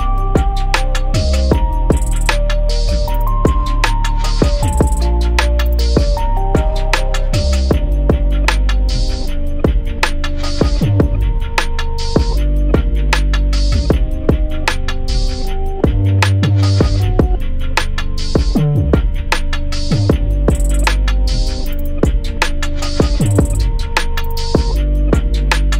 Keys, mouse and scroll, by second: 3.3-4.2 scroll down 1, 4.7 scroll up 1, 7.0 scroll down 1, 7.2 scroll up 1, 7.5 click, 8.3-8.7 scroll up 1, 8.7 click, 10.7 scroll down 1, 11.5-12.4 scroll up 1, 13.7 click, 14.6 alt+click, 17.3-18.4 scroll down 1, 19.4 z, 19.6 scroll up 1, 20.4 click.